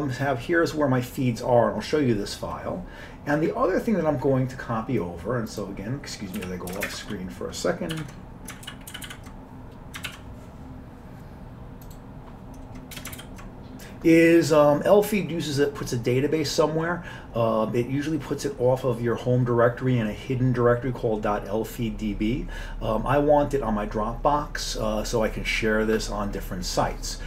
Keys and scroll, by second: 6.4 Down, 6.9 ctrl+shift+space, 8.0 ctrl+b, 8.7 ctrl+b, 9.0 ctrl+n, 9.1 ctrl+n, 10.1 alt+w, 13.0 Return, 13.2 ctrl+y.